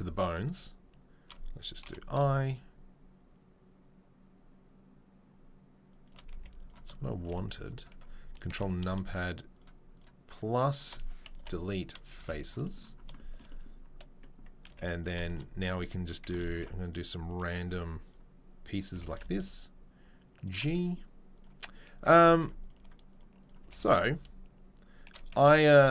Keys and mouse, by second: 0.4 shift+i, 6.7 z, 7.3 z, 8.5 ctrl+KP_Add, 9.5 shift+right click, 9.6 shift+middle click, 10.3 right click, 10.9-16.3 middle drag, 11.4 Delete, 12.2 z, 14.7 z, 16.3 ctrl+click, 16.5 ctrl+r, 16.6-25.9 middle drag, 17.7 1, 18.9 g, 22.3 ctrl+r, 23.6 g, 25.3 z.